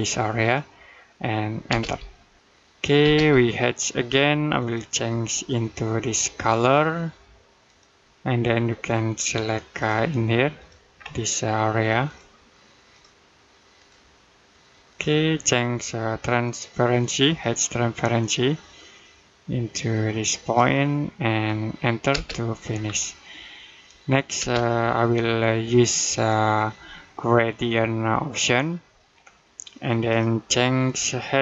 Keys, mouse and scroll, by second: 1.5 space, 4.4 click, 10.8-11.9 scroll up 1, 11.9 click, 17.2 click, 21.9 space, 22.7-23.0 scroll down 1, 23.0 middle click, 24.2 space, 26.0 click.